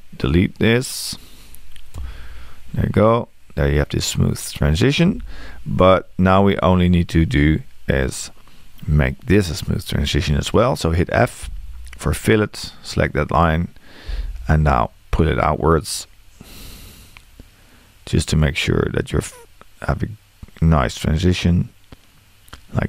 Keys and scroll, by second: 2.0 BackSpace, 11.5 f.